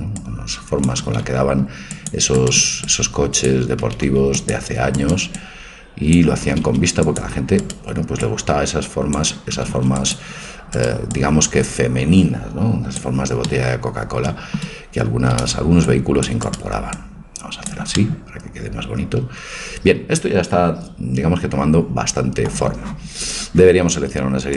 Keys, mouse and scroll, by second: 0.2-2.2 drag, 1.0 a, 1.2 c, 2.9-4.8 drag, 3.8 a, 4.1 c, 5.3-7.3 drag, 6.5 a, 6.7 c, 8.2-10.1 drag, 9.6 a, 9.8 c, 11.2-13.0 drag, 13.5-15.4 middle drag, 15.1 a, 15.4 c, 17.0-18.9 drag.